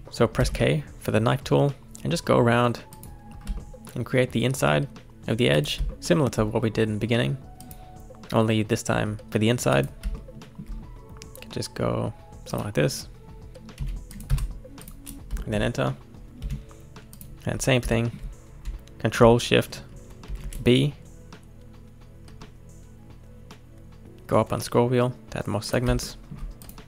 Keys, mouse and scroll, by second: 0.0 click, 0.4 k, 3.3 scroll down 1, 3.6 shift+middle click, 5.9-8.9 shift+middle drag, 10.1 shift+middle click, 10.7-11.9 scroll down 2, 14.8 click, 15.4-16.4 shift+middle drag, 16.4 1, 17.1 click, 17.5-17.9 scroll up 3, 17.9-20.3 shift+middle drag, 20.3 ctrl+shift+b, 26.1 shift+middle click, 26.6 click.